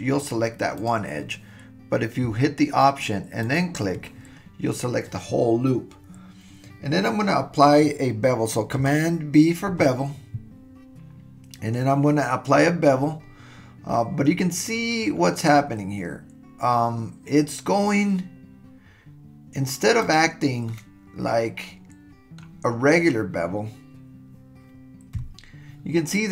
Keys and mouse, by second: 0.3 click, 0.8 click, 9.7 super+b, 20.7-22.4 middle drag, 25.2 KP_1.